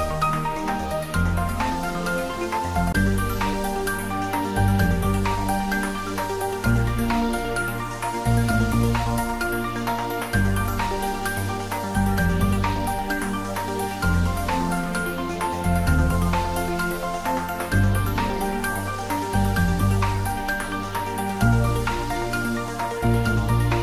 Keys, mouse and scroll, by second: 7.6 middle click, 11.6-13.7 scroll up 2, 14.5 click, 18.3 alt+shift+right click, 18.9 alt+shift+click, 21.0 ctrl+z.